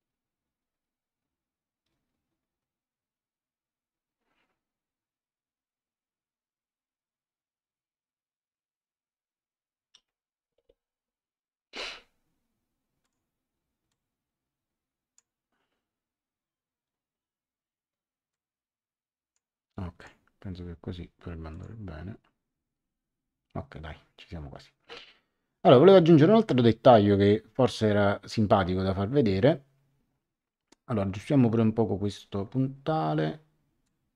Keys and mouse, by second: 13.0 click, 18.3 click, 19.9 click, 21.5 click, 33.8 click.